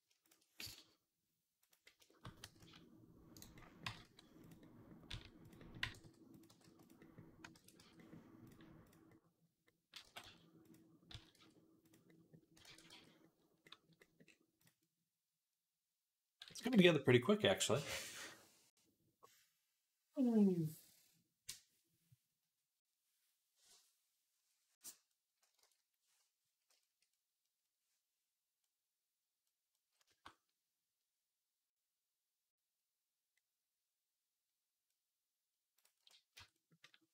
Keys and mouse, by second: 0.5 s, 2.3 g, 3.7 g, 4.9 s, 5.7 g, 6.3 g, 7.4 ctrl+a, 9.9 g, 10.9 s, 12.5 ctrl+a, 13.2 click, 14.4 click, 16.6 ctrl+s, 25.0-28.7 drag, 25.5 ctrl+s, 28.7-33.2 middle drag, 35.6 click, 36.2 Tab.